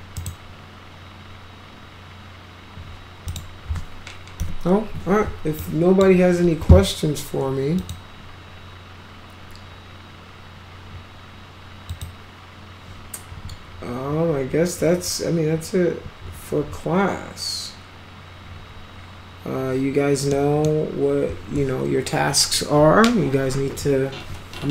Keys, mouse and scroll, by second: 0.2 right click, 3.3 click, 4.4 Delete, 5.6-6.0 drag, 7.8 click, 11.9 click, 20.3 middle click.